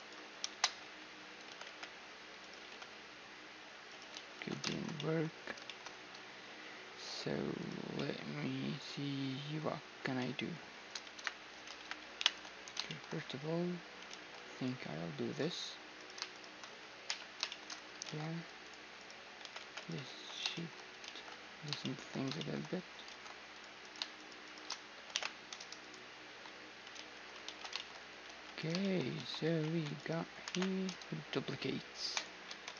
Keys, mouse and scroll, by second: 0.4 z, 1.1 g, 2.2 g, 3.8 ctrl+z, 4.4-7.5 middle drag, 7.2-9.1 right drag, 7.8-9.1 drag, 9.1 middle click, 9.8-14.6 middle drag, 10.8 KP_1, 11.4 ctrl+KP_1, 11.8 ctrl+KP_3, 13.7 ctrl+r, 14.6-15.3 scroll up 2, 14.9 middle click, 15.3 middle click, 15.6-17.4 drag, 16.7 j, 17.7 ctrl+Tab, 19.0 g, 19.7 ctrl+x, 20.7 ctrl+z, 22.4-23.4 middle drag, 22.7 ctrl+Tab, 23.4-25.9 right drag, 24.7 alt+m, 25.9 a, 26.6 ctrl+z, 27.1 ctrl+z, 27.4-30.6 middle drag, 27.9 g, 28.8 a, 29.1 z, 29.3 c, 30.1 alt+m, 30.1-31.5 drag, 32.1 a.